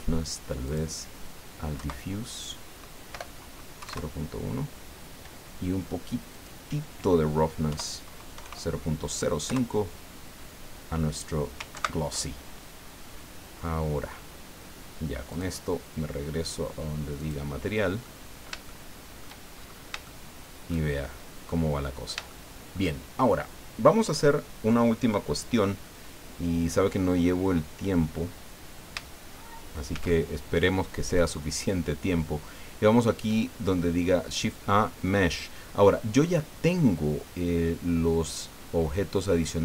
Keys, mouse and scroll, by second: 0.6 click, 1.7 Right, 3.1 BackSpace, 3.8 KP_1, 3.8 KP_Enter, 6.3 click, 7.7 End, 8.3 KP_0, 8.4 KP_5, 9.4 KP_Enter, 11.8 ctrl+Right, 12.9-13.2 scroll down 2, 15.3 click, 17.2 click, 18.0-19.4 middle drag, 19.5-19.9 shift+scroll up 1, 20.0 shift+middle click, 21.2-22.2 drag, 23.1 shift+scroll down 3, 29.9 shift+a.